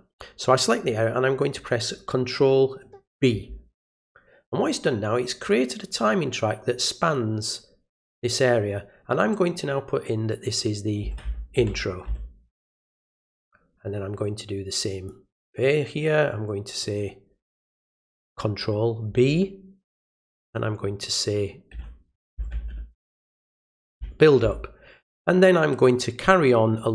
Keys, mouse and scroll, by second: 15.0-16.8 drag, 25.8 click.